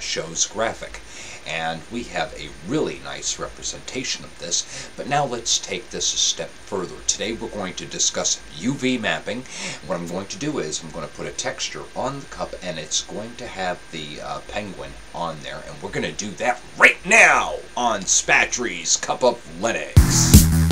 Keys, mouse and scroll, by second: 1.4-3.2 middle drag.